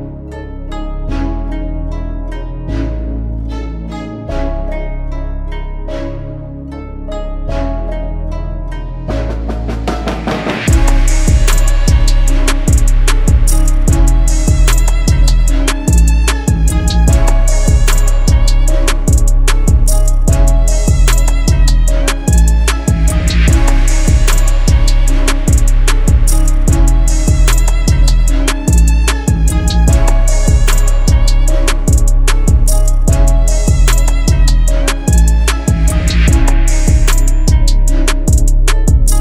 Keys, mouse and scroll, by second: 6.6-7.5 typing.